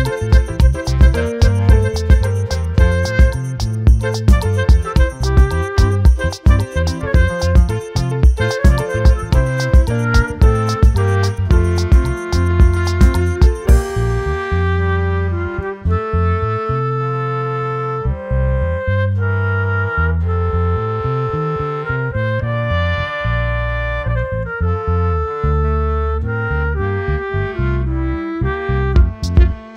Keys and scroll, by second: 3.7 ctrl+j, 17.4 ctrl+j.